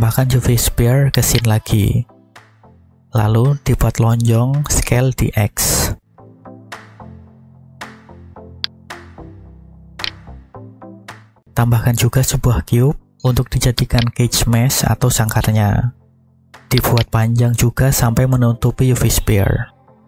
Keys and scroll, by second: 3.5 s, 4.8 x, 6.0 1, 6.1 0, 6.9 Return, 11.0 shift+a, 18.1 s, 18.9 x.